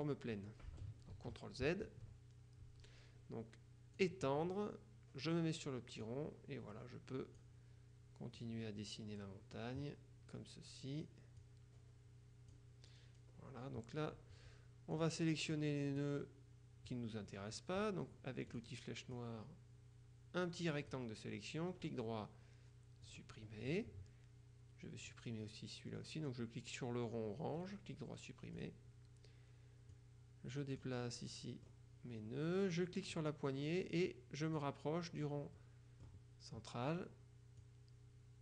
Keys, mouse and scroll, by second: 1.2 ctrl+z, 4.1 click, 6.1-7.9 drag, 8.5 click, 11.5 click, 13.0-13.7 scroll down 2, 15.0-16.5 drag, 18.6 click, 22.0 right click, 23.2 click, 25.1 click, 27.7 right click, 28.7 click, 30.0 click, 33.2-35.1 drag, 35.7 middle click, 37.7-38.4 drag.